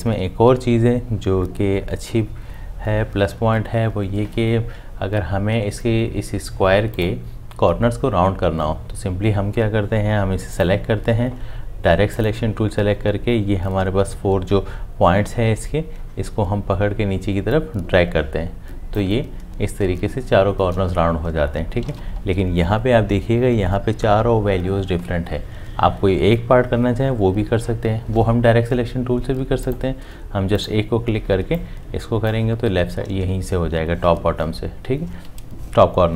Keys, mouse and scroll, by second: 21.8 ctrl+z.